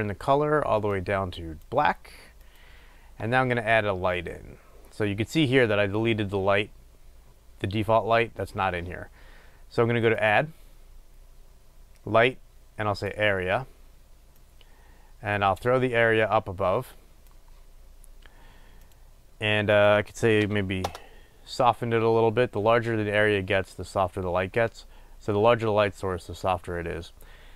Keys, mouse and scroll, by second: 13.2-27.5 drag, 21.2 Return.